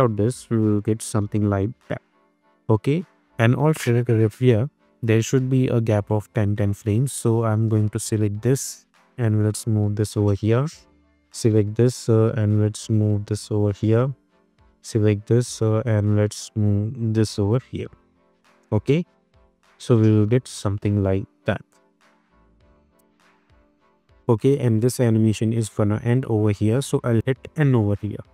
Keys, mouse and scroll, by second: 1.2 space, 1.9-2.5 drag, 4.3 =, 4.8-6.4 drag, 18.1 -, 18.7 space, 21.3 click, 21.6 space, 25.2-26.8 drag, 27.6 n, 28.1 space.